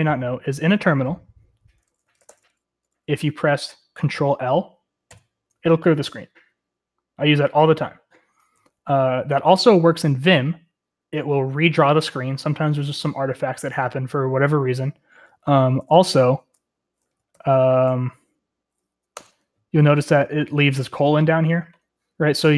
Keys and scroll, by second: 0.1 Escape, 0.1 typing, 1.9-2.7 typing, 5.0 ctrl+l, 15.9 ctrl+d, 17.4 shift+;, 19.3 Return.